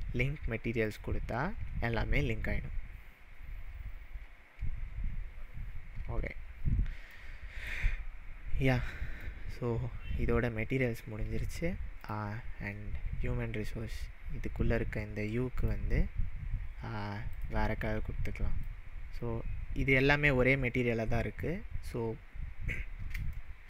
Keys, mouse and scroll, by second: 0.8 click, 6.6-7.1 scroll up 2, 7.2-7.7 middle drag, 12.0 click, 14.4-15.5 scroll up 3, 15.5 scroll up 2, 15.6 click, 17.3 click, 22.1 scroll down 1, 23.4-23.6 shift+middle drag.